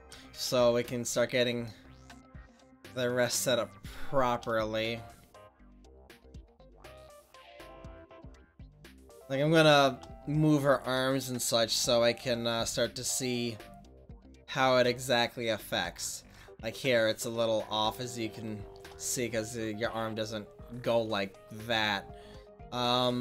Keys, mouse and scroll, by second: 5.7-9.8 drag, 12.6 r.